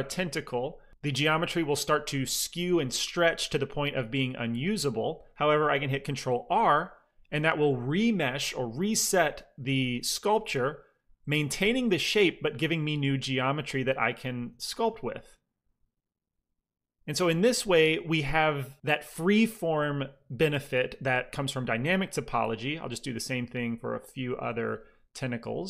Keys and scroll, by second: 6.3 ctrl+r, 14.8 f, 23.3 f, 24.5 f.